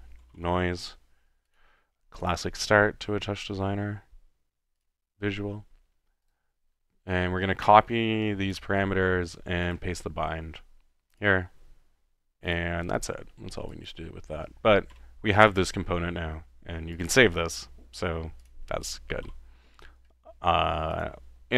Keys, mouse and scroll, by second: 0.0-0.9 typing, 1.5 click, 2.2-2.7 drag, 3.0-4.0 middle drag, 4.8-6.2 drag, 7.7 click, 9.8-11.1 middle drag, 11.1 click, 13.0-13.7 drag, 13.8-14.2 drag, 15.0 u, 15.4 click, 17.0-17.6 middle drag, 18.4-19.0 drag, 19.3 i, 21.0 click.